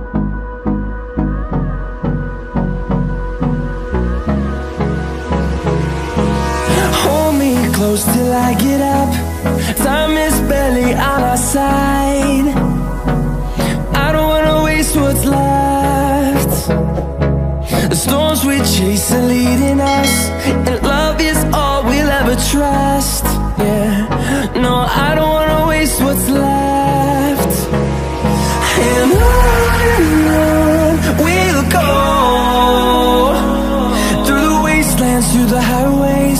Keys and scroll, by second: 0.7 ctrl+shift+a, 24.6 ctrl+shift+a.